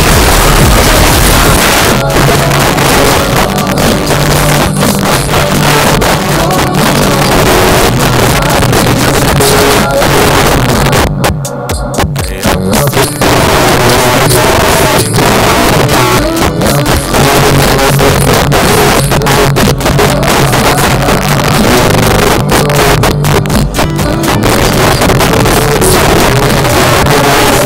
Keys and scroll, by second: 1.6 Page_Down.